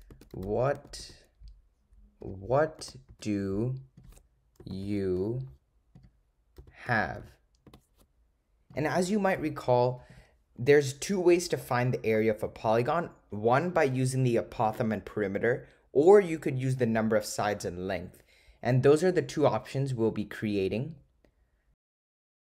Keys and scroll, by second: 0.2 -, 0.4 ^, 1.1 4, 2.3-7.3 typing.